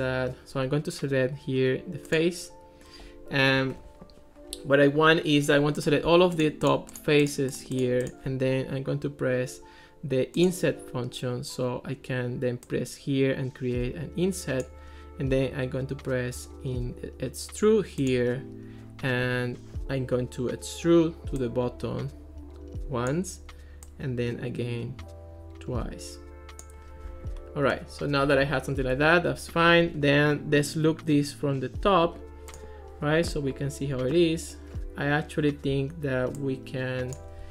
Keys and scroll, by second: 28.9 Escape.